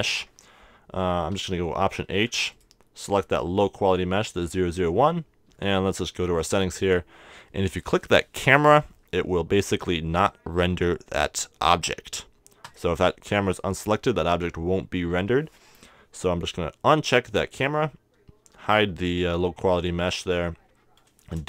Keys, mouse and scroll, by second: 1.4 alt+h, 2.2 a, 2.5-4.2 right drag, 5.6-9.8 middle drag, 12.6-14.6 drag, 18.4 h.